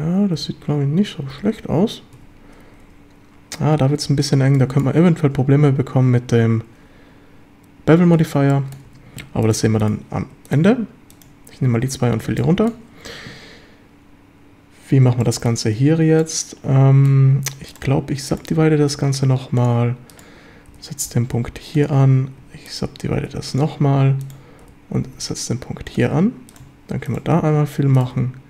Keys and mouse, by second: 0.4 f, 1.3 f, 2.2 1, 4.6 shift+middle click, 8.5 shift+middle drag, 8.9 a, 11.7 f, 12.0 a, 12.4 shift+click, 15.2-15.5 shift+drag, 16.2-17.1 shift+middle drag, 18.5 w, 20.7 g, 21.1 x, 21.7 ctrl+click, 23.1 w, 24.6 g, 24.9 x, 25.9 ctrl+click, 27.3 f, 28.0 click.